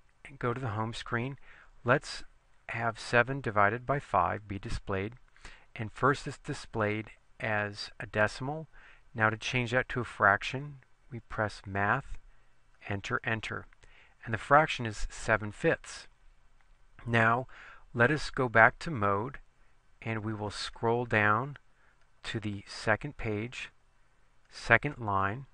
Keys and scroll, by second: 2.0 7, 4.0 5, 4.7 Return, 12.8 Return, 13.3 Return, 20.5 Down, 20.9 Down, 21.2 Down, 21.7 Down, 22.1 Down, 22.7 Down, 23.7 Down, 24.5 Down.